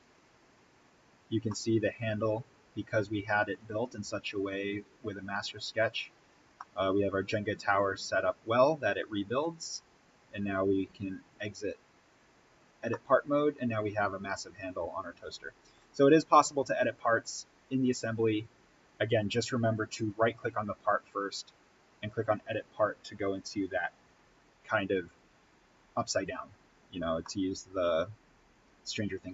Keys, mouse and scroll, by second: 1.2 scroll up 1, 1.4-5.9 middle drag, 6.5-9.3 middle drag, 9.3-11.2 scroll down 1, 11.2 click, 12.4-12.8 scroll up 1, 12.8-15.7 middle drag, 15.7-17.7 scroll down 1, 17.7 click, 19.8 right click, 25.0 click, 27.1-29.3 middle drag.